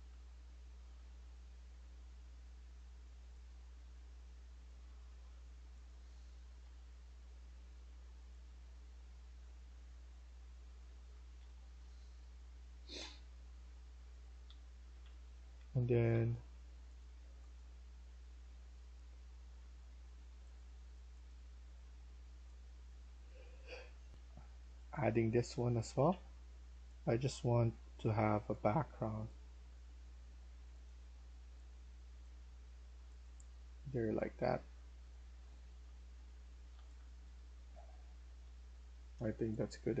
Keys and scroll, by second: 1.0-2.2 typing, 6.5 6, 9.0-9.5 typing, 10.9-11.7 typing, 13.0-16.0 typing, 18.9-19.6 typing, 24.0 F1, 24.8-25.8 typing, 32.8-37.7 typing, 39.8-40.0 typing.